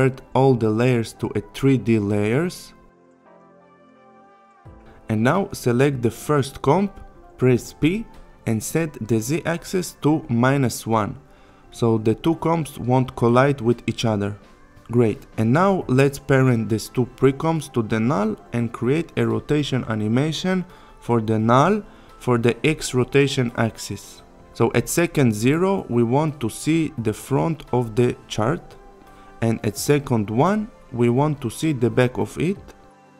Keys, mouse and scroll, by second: 2.1 click, 7.7 p, 8.8 click, 9.7 Down, 12.7 click, 14.8 shift+click, 19.0 r, 22.7 ctrl+z, 25.2 click.